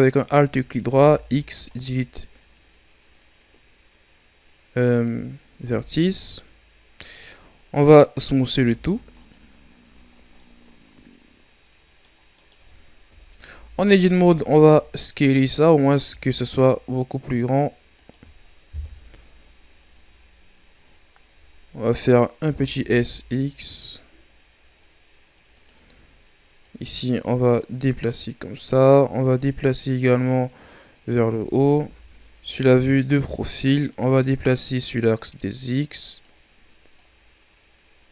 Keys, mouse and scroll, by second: 0.9 x, 4.9-5.6 scroll down 3, 5.6 Tab, 6.5-7.3 scroll down 3, 7.3-7.6 scroll up 3, 7.7 right click, 8.5 w, 9.8 a, 10.1 scroll down 2, 10.3-12.3 middle drag, 12.3 right click, 13.0 KP_3, 13.4 Tab, 13.8 a, 14.0 a, 14.3 a, 15.4-16.0 scroll up 3, 16.0 s, 18.7 KP_1, 20.2-21.4 ctrl+scroll down 1, 21.4-22.4 ctrl+scroll up 1, 22.4 s, 26.6-31.8 drag, 31.8 KP_3, 34.2-38.1 drag.